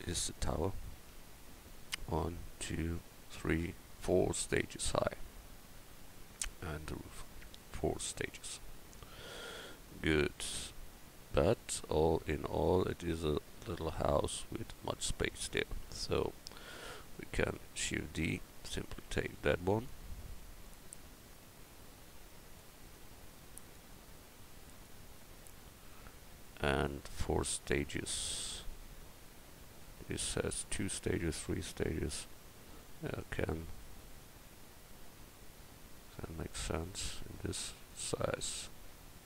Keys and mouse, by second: 14.8-16.0 middle drag, 16.2 middle click, 16.4 middle click, 17.8 shift+d, 23.7-25.4 middle drag, 32.8 Tab, 36.8 Tab.